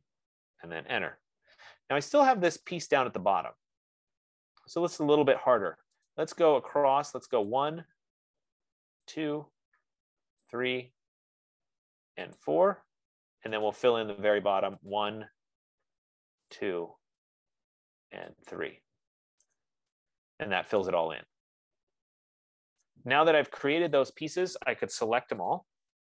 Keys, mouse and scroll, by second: 0.1 click, 1.3 Return, 5.7 right click, 6.5 right click, 7.9 click, 9.5 click, 11.0 click, 11.4 F15, 12.9 click, 14.1 right click, 15.4 click, 16.8 click, 19.8 Return, 23.3 right click, 24.4 click, 25.9 shift+click.